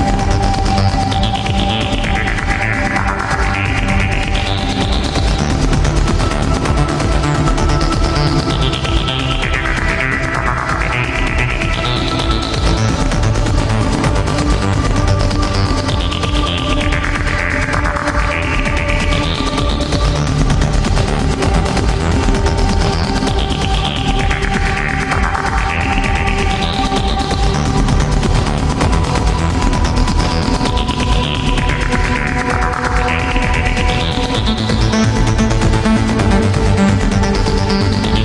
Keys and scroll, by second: 5.9 ctrl+z, 8.0 ctrl+z, 9.6 ctrl+z, 16.1 ctrl+z, 21.7 ctrl+z, 22.9 ctrl+z, 23.5 ctrl+z, 24.4 ctrl+z, 25.5 ctrl+z, 31.5 ctrl+z.